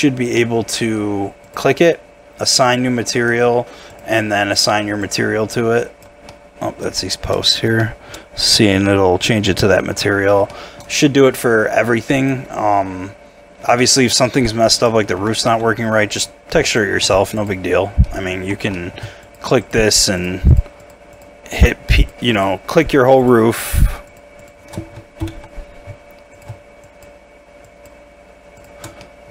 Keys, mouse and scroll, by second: 0.4 middle click, 6.3 middle click, 7.0 shift+middle click, 7.8 shift+middle click, 8.2 shift+scroll up 2, 8.8 shift+middle click, 10.1 scroll down 1, 10.5 shift+middle click, 13.0 scroll down 1, 13.8 shift+middle click, 15.1 Tab, 15.5 a, 16.6 double click, 17.0 Tab, 18.0 middle click, 18.5 Tab, 18.7 middle click, 19.2 shift+click, 25.2 ctrl+l, 26.8 shift+click, 27.6 shift+click, 28.6 shift+click, 29.0 shift+middle click.